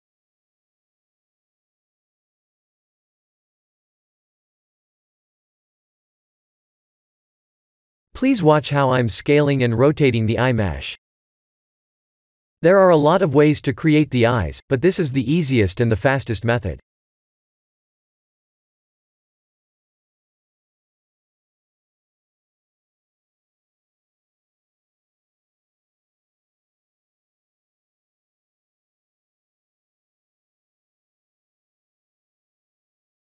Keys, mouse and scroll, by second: 1.5 click, 2.4 shift+z, 2.8 middle click, 6.7 click, 7.1 ctrl+3, 7.6 click, 7.9 middle click, 9.0 right click, 9.7 middle click, 10.7 KP_1, 11.5 middle click, 13.7 KP_3, 14.2 s, 18.6 shift+middle click, 19.1 scroll up 1, 20.6-21.6 scroll up 5, 20.6 r, 24.9 click, 27.0 middle click, 28.6 KP_7, 29.8 r.